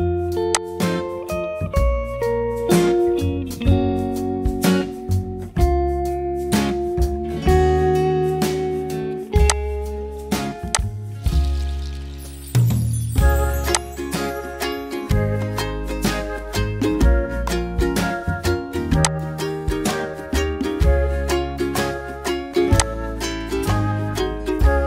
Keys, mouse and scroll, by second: 0.4 ctrl+click.